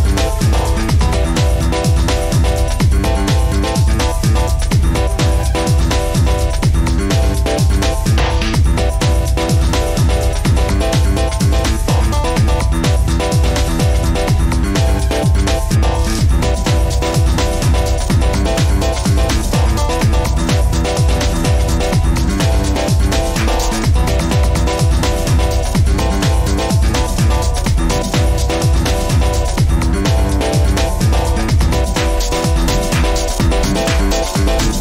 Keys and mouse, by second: 4.1 shift+middle click, 5.1-6.2 middle drag, 7.2-7.7 middle drag, 8.6 ctrl+r, 13.4-14.2 right drag, 14.4 middle click, 17.4 shift+middle click, 18.3 ctrl+z, 19.8-20.1 middle drag, 20.5 middle click, 22.4 ctrl+r, 27.4 ctrl+z, 27.5 ctrl+z, 29.4 Tab, 30.7 ctrl+z, 30.9 ctrl+z, 31.6 ctrl+z.